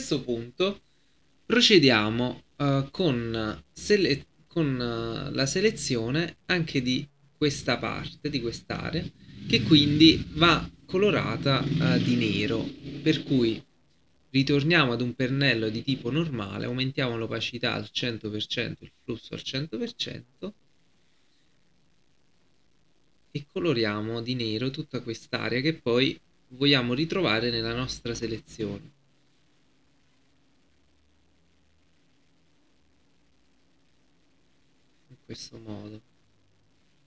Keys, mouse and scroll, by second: 4.2-17.9 drag, 19.9 right click, 20.8-28.1 drag, 28.1 right click, 28.8-37.0 drag.